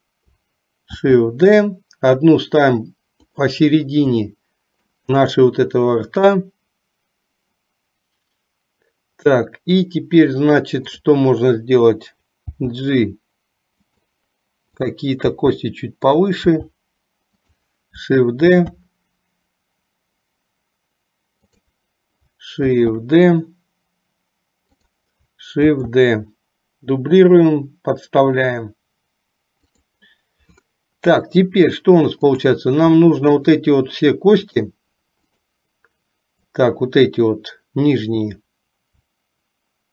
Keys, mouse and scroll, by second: 1.1 shift+d, 4.4 shift+middle click, 11.0 click, 12.5 g, 14.8 click, 15.5 g, 18.7 shift+d, 22.8 shift+d, 25.8 shift+d, 33.5 shift+click.